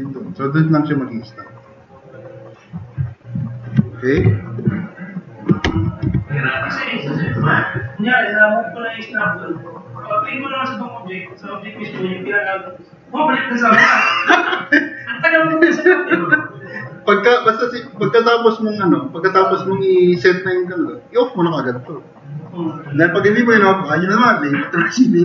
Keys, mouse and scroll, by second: 3.1 middle drag, 4.2 i, 4.7 middle drag, 5.7 4, 6.1 e, 6.5 click, 16.5 click.